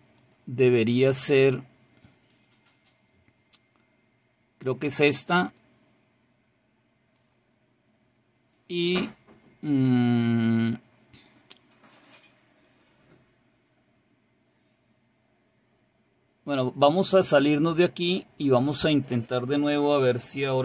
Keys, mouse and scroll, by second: 0.3 click, 2.4 click, 5.5 click, 7.2 click, 17.9 click, 18.7 click.